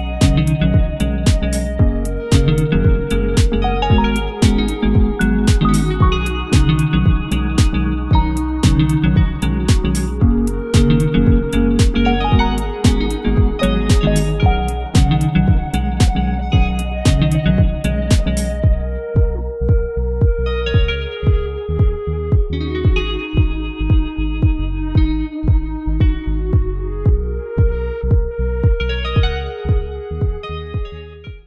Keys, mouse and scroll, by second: 3.7 2, 3.8 8, 4.0 Return, 5.7 Return, 5.8 middle click, 5.8-6.4 scroll up 2, 6.2 middle click, 7.7 scroll down 1, 8.3 scroll down 1.